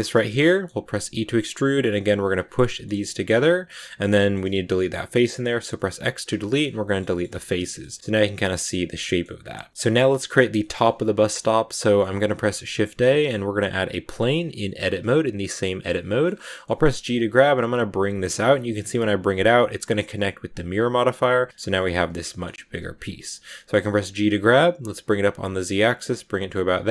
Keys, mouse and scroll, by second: 0.2 scroll down 1, 0.3 shift+middle click, 0.9 e, 2.6 shift+middle click, 2.9 g, 4.1 middle click, 4.8 x, 6.3 shift+middle click, 6.5 scroll down 3, 6.8-9.3 shift+middle drag, 9.3-9.8 scroll up 3, 9.8-12.2 middle drag, 12.2 shift+a, 14.6 scroll down 3, 14.8-16.3 middle drag, 16.3 scroll up 1, 16.3 middle click, 16.7 g, 18.4 middle click, 18.7 g, 19.7 middle click, 19.9 g, 21.7 middle click, 22.4 scroll up 1, 22.5 g, 23.0 scroll down 2, 23.2 middle click, 23.7 g, 25.9 middle click, 26.7-26.9 scroll up 2.